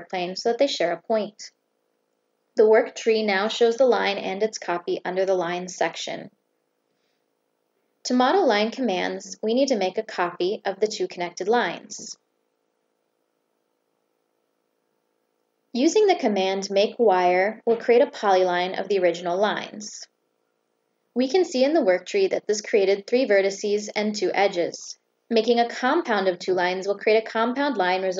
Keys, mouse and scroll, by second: 0.1 click, 1.7 click, 3.1 click, 3.8 click, 4.5 click, 5.3 click, 5.8 click, 6.1 click, 7.1 click, 7.4 click, 11.5 click, 12.4 click, 13.1 right click, 14.6 click, 17.1 click, 18.3 click, 19.5 click, 20.1 click, 20.4 click, 20.7 click, 21.1 click, 22.3 click, 23.0 click, 23.2 click, 23.5 click, 23.8 click, 24.5 click, 26.1 click, 27.3 click.